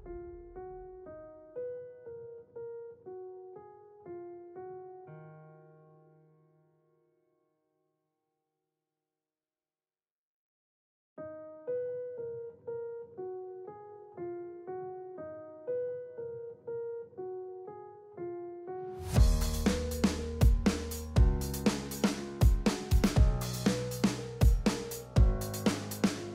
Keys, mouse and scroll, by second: 0.0 p, 0.7-1.6 drag, 1.8 space, 2.4 space, 4.1 click, 4.4-6.4 alt+drag, 7.4 space, 8.8 space, 9.2-9.9 drag, 16.6 ctrl+z, 16.8-17.2 drag, 24.6-25.4 drag.